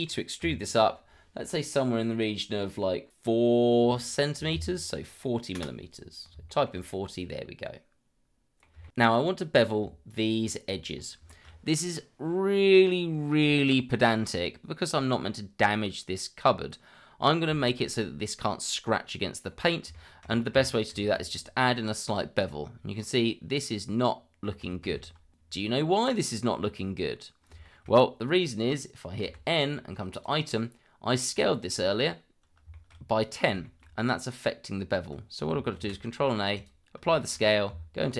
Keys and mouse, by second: 0.4 e, 4.3 KP_4, 4.5 KP_0, 5.5 Return, 6.5 shift+middle click, 6.8-8.6 middle drag, 8.8 shift+middle click, 9.7 Tab, 10.0 click, 10.8 shift+click, 11.0 shift+middle drag, 11.4 shift+middle click, 11.8-12.9 middle drag, 19.9 shift+middle drag, 20.9 ctrl+b, 23.5-24.4 middle drag, 24.8 ctrl+z, 25.8 Tab, 27.6 shift+middle drag, 29.2 n, 30.1 click, 32.7 shift+middle drag, 33.6 shift+middle drag, 35.7 ctrl+a, 37.2 shift+middle drag, 37.7 Tab.